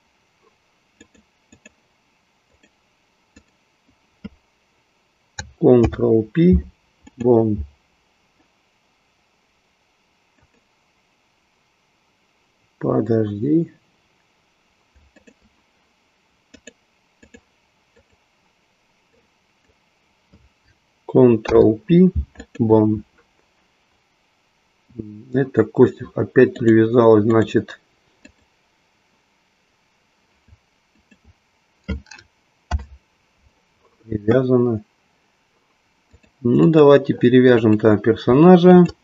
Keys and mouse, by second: 2.3 click, 3.4 click, 5.7 ctrl+p, 10.4 click, 16.4-17.4 drag, 18.1-20.0 drag, 22.4 ctrl+p, 26.6-28.6 drag, 30.8 shift+click, 32.6 ctrl+p, 36.1-37.0 drag, 37.6 click.